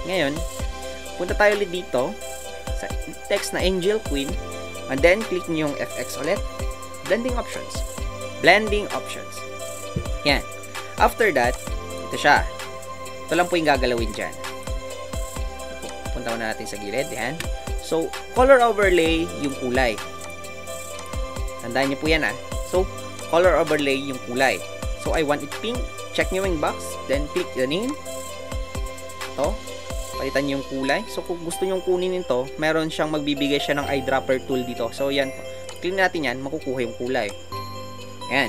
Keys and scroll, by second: 15.6 space.